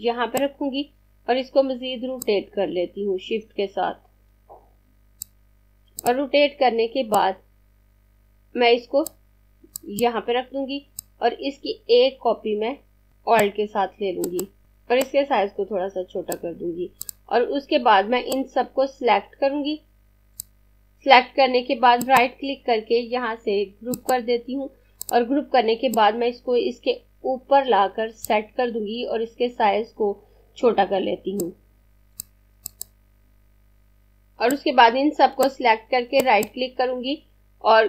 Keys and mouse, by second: 5.4 click, 14.3 click, 21.8 right click, 23.8 click, 31.1 click, 36.1 right click.